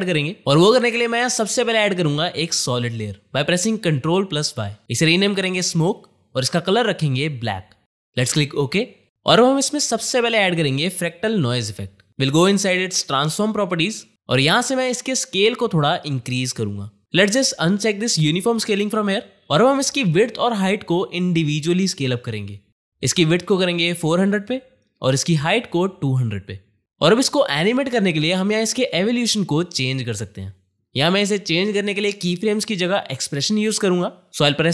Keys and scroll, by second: 9.9 ctrl+space, 10.3 f, 10.9 Down.